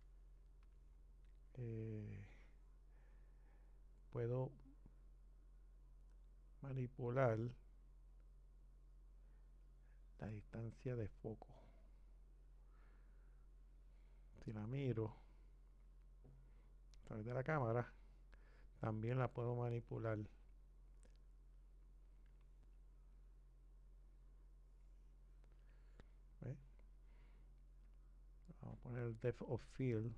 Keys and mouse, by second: 12.5 click, 17.1 click, 20.6 click.